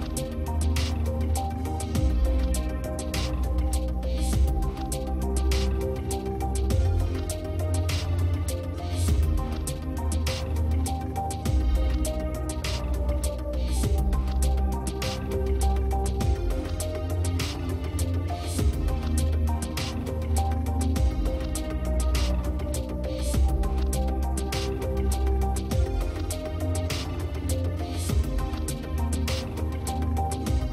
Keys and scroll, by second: 6.0 space, 14.1 space, 24.2 space, 24.9 space, 26.8 ctrl+alt+z.